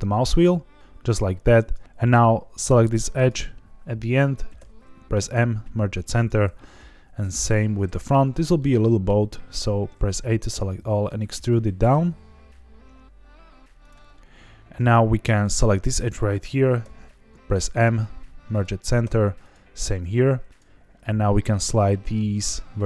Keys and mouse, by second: 1.5 click, 3.2 click, 4.5 m, 6.4 m, 8.1 shift+middle click, 8.5 middle click, 10.4 a, 10.4 e, 13.8 click, 14.1 middle click, 16.8 m, 19.0 m, 20.1 1, 20.5 click.